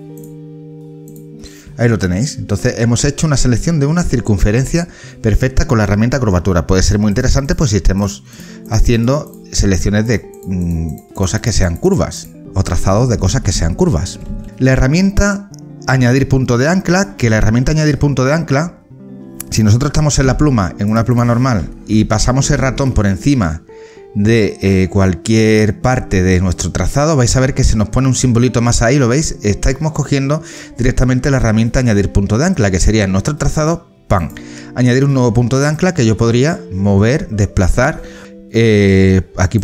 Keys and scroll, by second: 12.4 ctrl+z, 20.2 o, 21.9 ctrl+z.